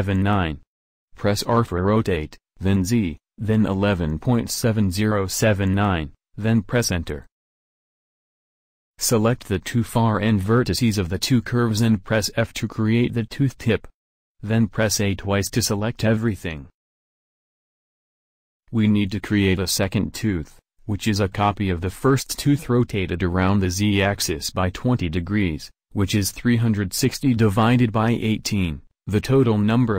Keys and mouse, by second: 0.9 r, 7.4-8.6 middle drag, 8.6-11.3 drag, 11.3 f, 14.5 a, 14.8 a, 21.4-29.9 drag.